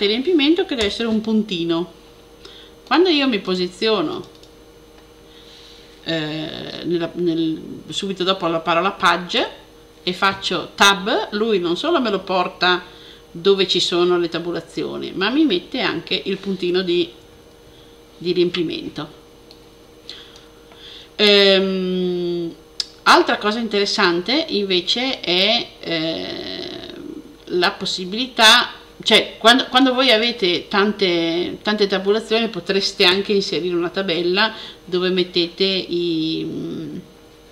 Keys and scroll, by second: 0.6 ., 17.1 super++.